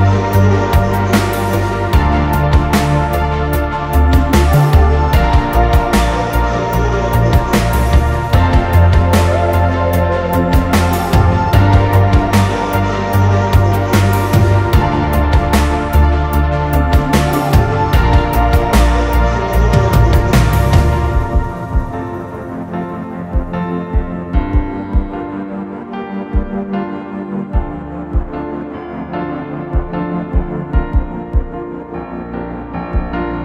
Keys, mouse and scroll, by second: 0.2-2.3 typing, 3.4-15.9 typing, 18.2 typing, 19.5 Escape, 20.0-21.5 typing, 23.3-23.7 typing, 25.5 typing, 27.4 click, 28.4 typing, 31.1-33.4 typing.